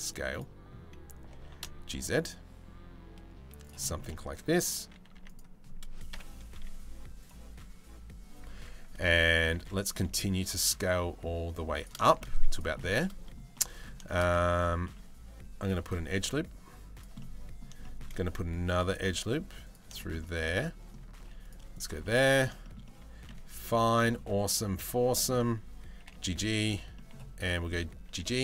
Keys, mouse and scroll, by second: 1.0 g, 3.5 shift+middle click, 3.7 middle click, 4.8 2, 5.8 KP_7, 6.2 z, 9.0 a, 9.2 s, 11.7 shift+middle click, 12.0 z, 12.4 middle click, 13.2 middle click, 13.7 shift+middle click, 14.5 ctrl+r, 16.7 middle click, 17.4 shift+middle click, 19.5 shift+middle click, 19.8 middle click, 20.8 ctrl+r, 21.6 middle click, 22.2 shift+middle click, 23.2 2, 23.6 middle click, 24.2 1, 24.7 middle click, 25.6 g, 26.5 middle click, 27.2 g.